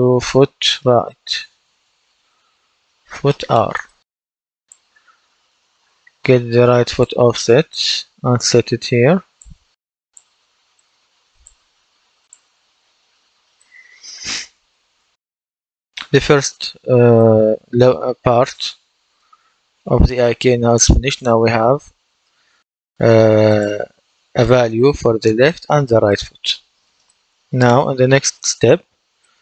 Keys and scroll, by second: 0.0-1.1 typing.